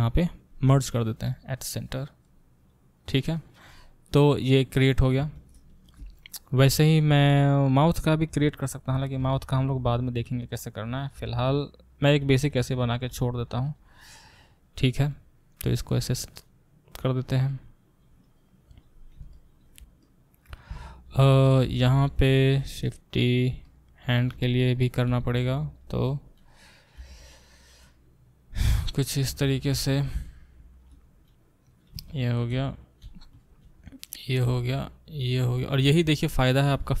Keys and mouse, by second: 0.6 m, 2.2-6.9 drag, 5.1-14.2 ctrl+alt+middle drag, 8.3 shift+d, 10.2 e, 11.2 e, 13.1 e, 14.2-21.5 drag, 21.5-28.7 alt+middle drag, 22.6 shift+d, 25.1 g, 26.1 e, 27.0 e, 28.7 click, 28.7-37.0 middle drag, 31.0 e, 33.3 e, 35.8 e.